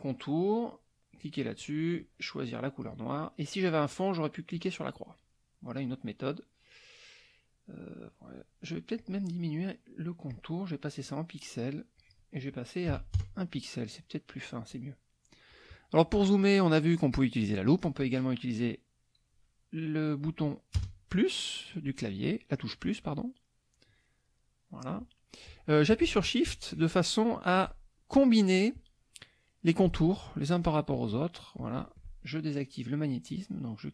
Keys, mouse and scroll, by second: 0.4 click, 1.2 click, 1.9 click, 3.4 click, 4.5 click, 5.3 middle click, 8.9 click, 10.3-11.6 drag, 11.9 click, 12.9 KP_1, 13.1 KP_Enter, 14.1 middle click, 15.9 click, 20.8 KP_Add, 22.9-23.9 drag, 24.0 click, 26.5 shift+click, 27.7 shift+click, 30.0 shift+click, 30.4 shift+middle click, 30.5 shift+click, 30.9 shift+click, 31.5 shift+click, 33.8 click.